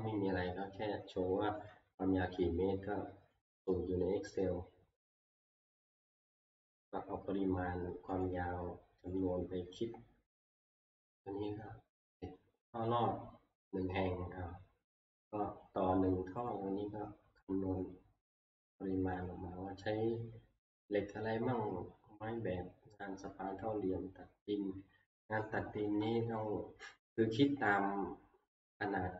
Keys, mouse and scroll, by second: 1.7 click, 2.6 shift+middle click, 3.3 middle click, 4.2 middle click, 4.3 middle click, 4.4 middle click, 4.8 shift+middle click, 6.7 click, 8.2 click, 9.2 click, 25.4 middle click, 25.5-26.3 scroll down 4, 27.6 middle click.